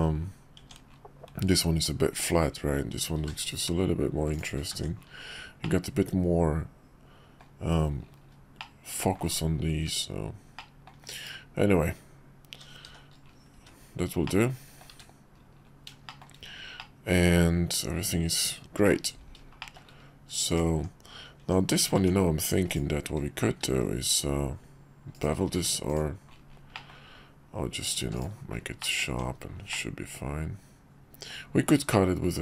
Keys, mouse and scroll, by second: 0.6 Tab, 2.1 Tab, 3.2 ctrl+b, 4.7 Tab, 5.6-7.4 middle drag, 8.6-9.1 middle drag, 10.5 click, 11.3 /, 12.9 shift+2, 13.5 `, 14.2 middle click, 14.9 `, 16.0 shift+middle click, 16.8-18.9 middle drag, 19.6 shift+middle click, 20.7 Tab, 22.7 click, 23.7 ctrl+b, 25.5 q, 26.7 middle click, 27.8 click, 28.0 q, 28.8 middle click, 29.1 Tab, 29.7-31.3 middle drag.